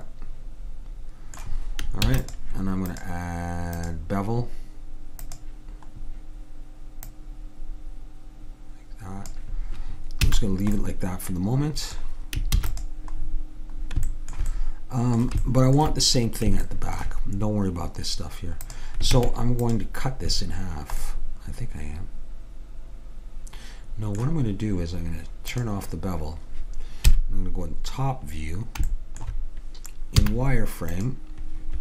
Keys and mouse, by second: 2.1 ctrl+s, 2.9-7.1 drag, 7.2-8.9 drag, 10.3 a, 10.9-12.6 middle drag, 12.6 ctrl+s, 14.2-17.9 middle drag, 18.7-20.5 drag, 19.2 Tab, 25.6-27.1 drag, 27.1 KP_7, 30.2 z.